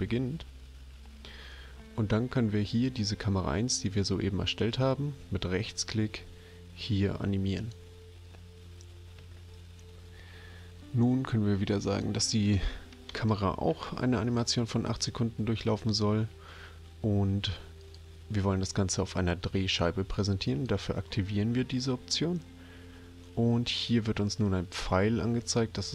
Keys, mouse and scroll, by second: 4.7 right click, 7.6 click, 11.9 click, 13.1 BackSpace, 13.2 8, 17.8 click, 20.5 click.